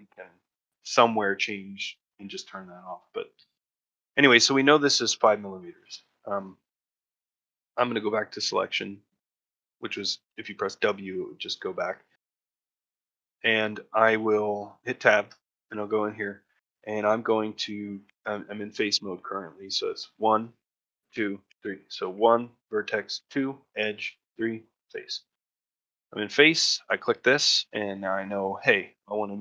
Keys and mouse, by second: 3.3-3.6 shift+middle drag, 3.9 middle drag, 5.9 click, 6.4 shift+middle drag, 6.7 middle drag, 7.0 shift+middle drag, 7.3-7.6 middle drag, 9.9-10.5 ctrl+middle drag, 12.2 middle click, 12.6-12.9 shift+middle drag, 15.1 Tab, 15.7 middle click, 16.1 shift+middle click, 16.4 middle click, 17.2 middle click, 19.9 1, 25.0 middle click, 25.7 ctrl+middle click, 27.2 ctrl+middle click, 27.6 middle click, 28.5 shift+middle click.